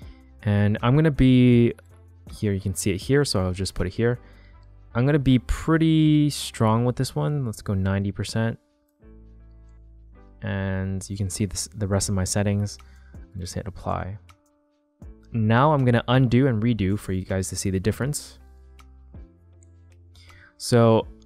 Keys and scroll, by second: 17.7 shift+super+z, 18.7 super+z.